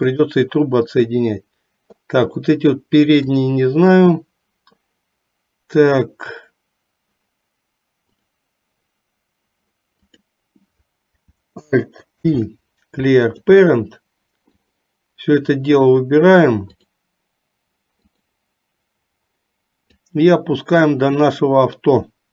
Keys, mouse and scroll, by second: 3.5 click, 8.3 click, 10.0 click, 12.2 alt+p, 14.6-15.8 drag, 16.8 click, 18.2 click, 20.2-22.3 drag.